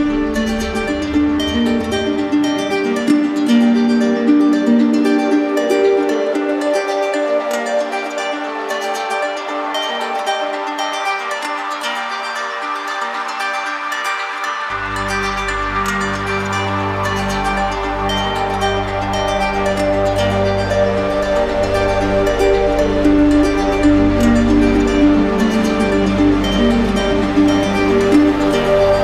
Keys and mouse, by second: 1.5 click, 1.8 ctrl+z, 1.9 ctrl+z, 8.4 click, 9.9 click, 10.3 click, 12.0 right click, 13.3 right click, 14.1 ctrl+click, 16.2 right click, 16.8 z, 17.1 right click, 17.9 click, 18.9 right click, 20.3 click, 22.4 alt+click, 22.7 ctrl+z, 27.2 alt+click, 28.1 ctrl+click.